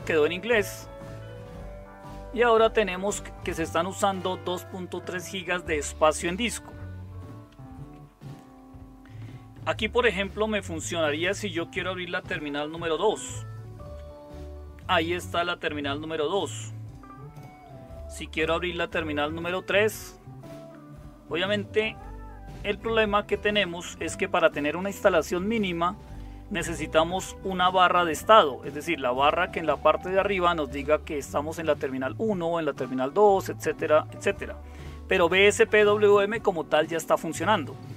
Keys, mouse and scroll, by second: 13.4 super+2, 19.7 super+3, 22.5 super+1, 25.3 super+2, 28.3 super+5.